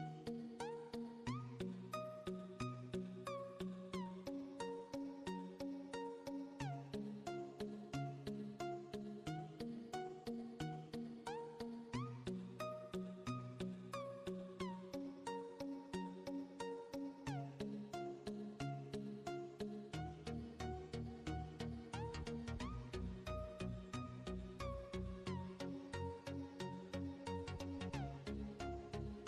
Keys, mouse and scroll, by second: 0.0-1.1 drag, 1.5 KP_1, 2.3 scroll up 4, 3.1-6.2 drag, 6.3 click, 7.4 shift+a, 15.5 click, 16.5 click, 19.9 Tab, 20.4 click, 21.4 click, 22.8 b, 24.2 click, 26.1 click, 26.4 b, 27.7 click.